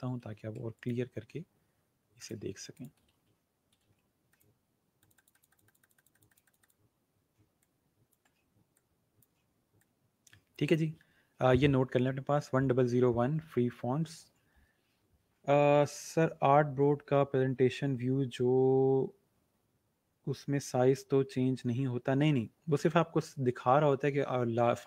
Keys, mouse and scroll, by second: 0.2 ctrl+c, 0.7 click, 3.0 ctrl+v, 3.8 ctrl+a, 4.2-10.9 drag.